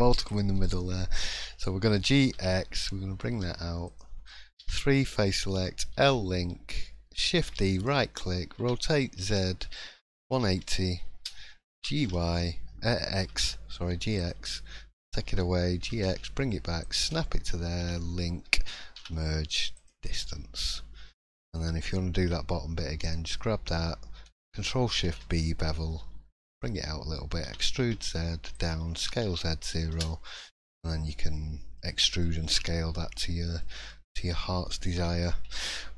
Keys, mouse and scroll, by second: 0.2 click, 0.6 middle click, 1.9 g, 4.6 3, 5.9 l, 7.5 shift+d, 8.6 r, 14.2 g, 17.8 l, 19.8 m, 20.5 middle click, 21.3-22.0 scroll up 1, 22.2-22.9 scroll up 1, 22.2 1, 23.0 click, 23.3 middle click, 25.0 ctrl+shift+b, 27.4 e, 29.8 s, 31.3 middle click, 32.0 shift+middle click, 32.8-33.5 scroll down 5, 33.4 middle click, 33.8 shift+middle click, 34.3-34.9 scroll up 1, 34.9 3, 35.1-35.4 scroll down 2, 35.6 shift+middle click.